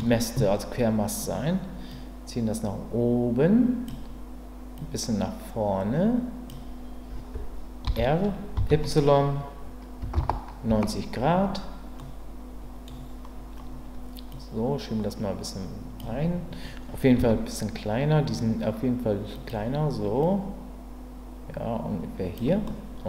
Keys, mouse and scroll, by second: 1.9-3.9 drag, 4.8-6.5 drag, 7.8 r, 8.5 y, 10.0 KP_9, 10.7 KP_Enter, 12.0 middle click, 14.4-16.0 drag, 17.2 s, 19.3 click, 20.4-22.3 drag, 22.6 middle click, 22.6-23.0 scroll up 1.